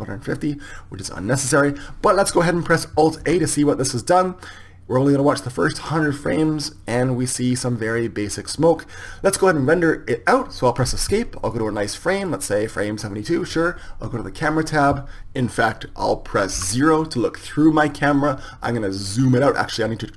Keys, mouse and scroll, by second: 11.6 Escape, 12.5-14.3 drag, 15.1 KP_0, 16.6 KP_0.